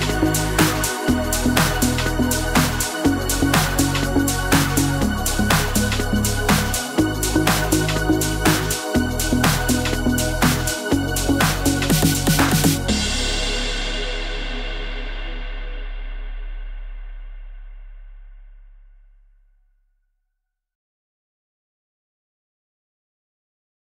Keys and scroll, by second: 7.4-7.9 typing.